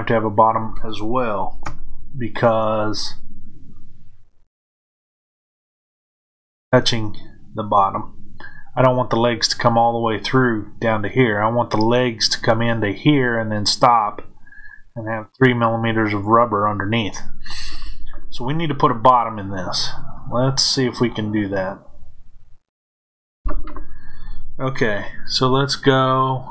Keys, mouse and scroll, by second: 1.6 KP_1, 4.2 click, 20.1-26.5 middle drag.